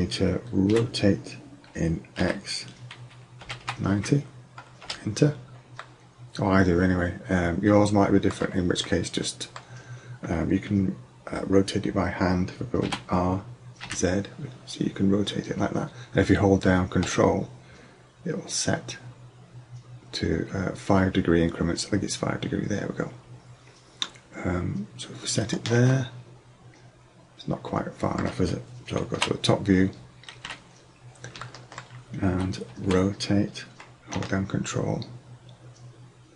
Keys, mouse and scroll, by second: 0.7 r, 6.0-6.7 middle drag, 7.1 middle click, 7.7 middle click, 7.8 middle click, 8.7-9.1 middle drag, 12.8 r, 26.1 middle click, 26.2-26.9 middle drag, 27.3 middle click, 27.5 middle click, 29.2 KP_7, 30.5 KP_5, 32.9 r.